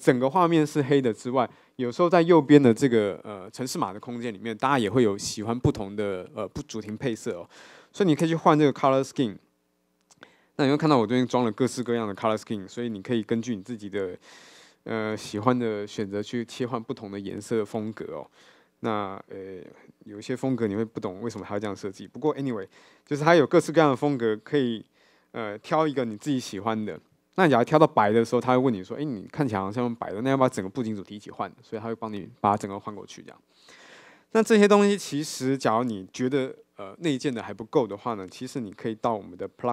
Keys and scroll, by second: 20.5 ctrl+`.